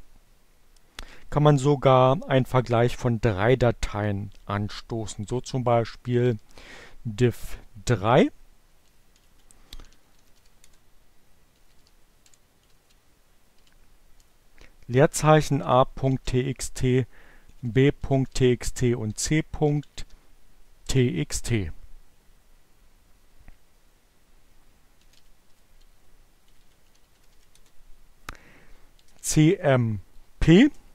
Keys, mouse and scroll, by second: 3.7 d, 5.9-7.0 typing, 8.5-12.4 typing, 10.5 Return, 14.0-19.8 typing, 24.1-29.5 typing.